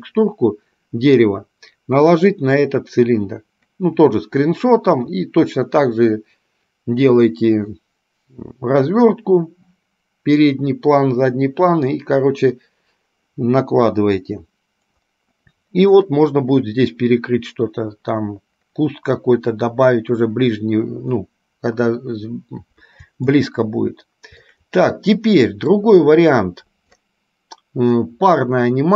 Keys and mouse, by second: 23.5-24.8 shift+middle drag, 25.5 middle click.